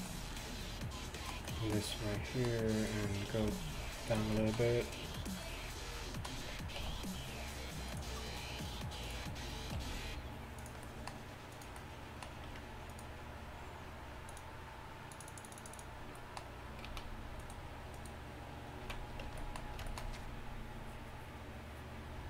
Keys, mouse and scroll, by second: 2.3 e, 3.5 g, 7.9 e, 9.8 r, 12.5 Tab, 16.3 click, 16.9-17.9 drag, 16.9 z, 17.6 middle click, 17.6 right click, 18.9 z, 19.3 Tab.